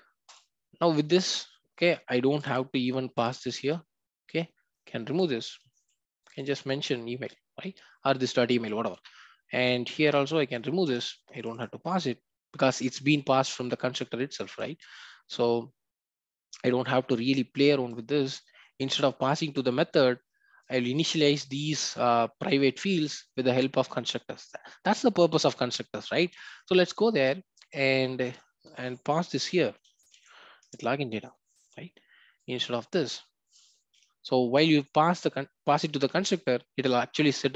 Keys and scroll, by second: 5.6 Delete, 30.6 Return.